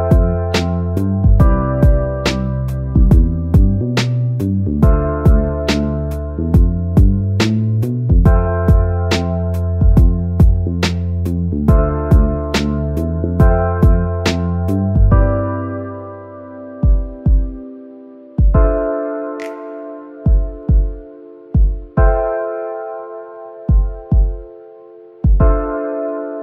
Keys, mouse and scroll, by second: 2.8 click, 3.9-6.2 drag, 6.2 scroll up 3, 6.8 click, 7.6-8.0 scroll down 1, 8.0-8.8 middle drag, 8.8 scroll up 2, 9.5-9.9 scroll up 1, 10.8 click, 12.5 click, 13.6-14.5 scroll down 5, 14.5-16.6 middle drag, 16.6 scroll down 3, 16.9 shift+a, 20.6-20.9 scroll down 1, 20.9 middle click, 21.3 s, 22.9-23.4 drag, 24.0-24.5 scroll down 5, 24.5-26.1 middle drag, 25.6-26.4 scroll down 5.